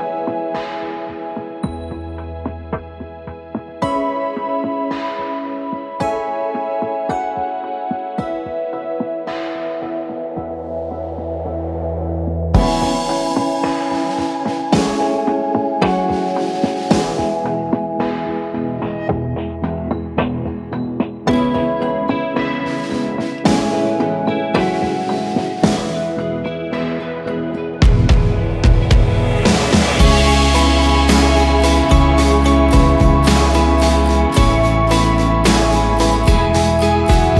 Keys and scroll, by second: 36.2 ctrl+8.